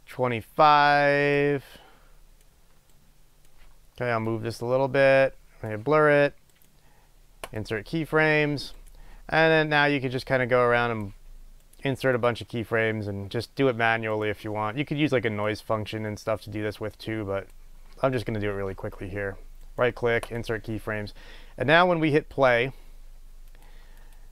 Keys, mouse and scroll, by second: 0.1-4.4 right drag, 4.4-6.7 drag, 6.7-9.3 right drag, 10.6-11.8 drag, 11.8-14.4 right drag, 15.7-20.6 drag, 20.6-22.7 right drag, 24.2-24.3 drag.